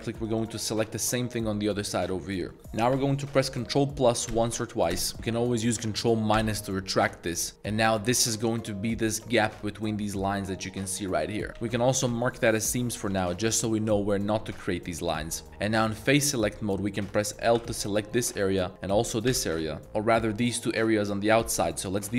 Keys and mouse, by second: 0.2 alt+shift+click, 1.3 middle click, 2.0 middle click, 2.5 middle click, 4.3 ctrl+KP_Add, 4.9 ctrl+KP_Add, 6.3 ctrl+KP_Subtract, 7.1 middle click, 11.4 middle click, 11.7 ctrl+e, 12.9 a, 13.2 a, 14.7 middle click, 15.3 3, 17.5 l, 19.3 l, 21.4 a, 21.5 a.